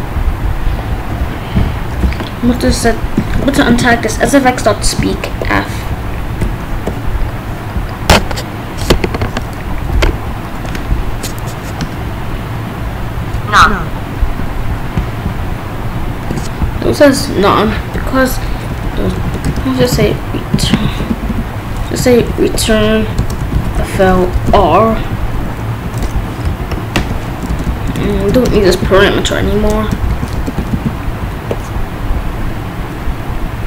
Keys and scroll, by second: 3.1 s, 7.5 ctrl+b, 10.0 Up, 11.8 Return, 17.9 BackSpace, 19.4 Return, 19.6-20.6 typing, 21.1 ctrl+z, 22.0 ctrl+y, 23.0 n, 23.2 space, 23.4 f, 24.3 Return, 24.7 Down, 27.0 Left, 27.3 BackSpace, 28.8 ctrl+s, 29.9 Left, 30.3 BackSpace, 30.7 ctrl+s.